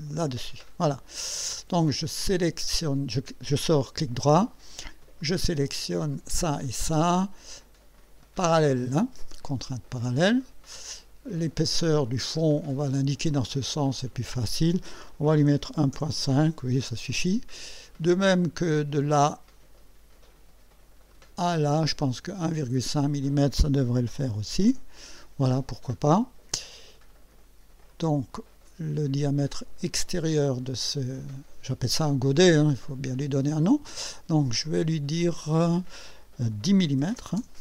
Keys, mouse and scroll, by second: 0.0 click, 0.6 right click, 1.2 scroll up 1, 2.1 right click, 5.2 click, 6.1 click, 9.6 click, 11.6 click, 13.8 click, 15.0-16.2 typing, 18.8 click, 21.1 click, 23.3 click, 24.0 1, 24.3 KP_Decimal, 24.4 KP_5, 24.7 KP_Enter, 27.9 click, 29.9 click, 34.7 click, 36.9 KP_1, 37.1 KP_0, 37.4 KP_Enter.